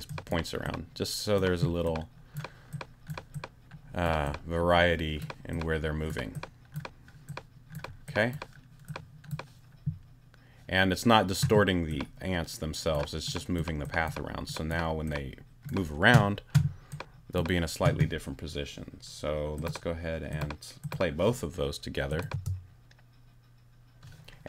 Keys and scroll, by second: 22.3 space.